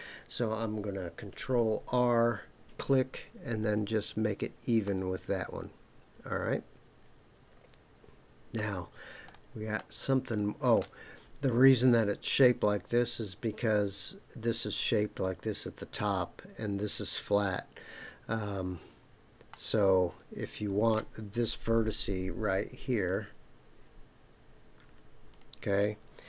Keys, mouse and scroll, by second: 1.8 ctrl+r, 4.2 click, 4.8-8.6 middle drag, 9.1-9.4 scroll up 3, 9.8-10.8 middle drag, 10.9-12.6 scroll down 3, 19.5-20.9 middle drag, 23.0 click, 25.3 click.